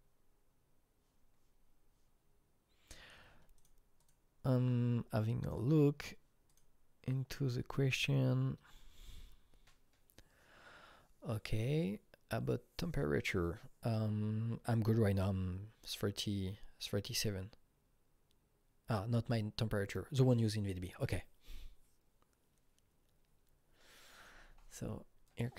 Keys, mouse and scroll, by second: 3.6 click, 4.0 click, 5.4 click, 6.5 click, 25.3-25.5 drag.